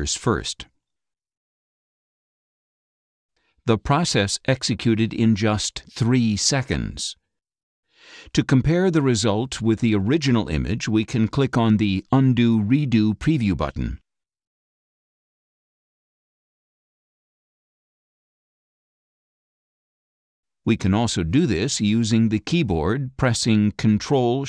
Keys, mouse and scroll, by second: 5.0-6.5 drag, 20.8 click, 22.7 click.